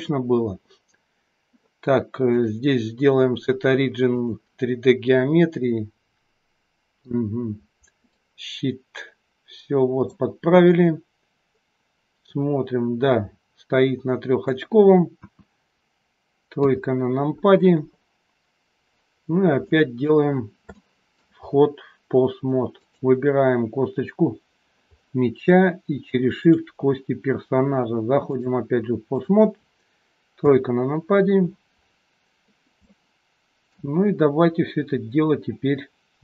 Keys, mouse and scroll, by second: 2.3 click, 5.5 middle click, 8.0 click, 10.8 middle click, 15.2 KP_1, 16.5 KP_3, 19.4 scroll up 1, 19.6 middle click, 20.3-20.7 scroll up 5, 20.7 shift+middle click, 21.4-22.4 scroll up 1, 22.4-22.8 scroll up 1, 22.8 click, 24.2-25.4 scroll up 7, 28.3 shift+click, 30.4 KP_3, 30.9-31.5 scroll down 6, 32.9 shift+middle click, 32.9-33.4 scroll down 10.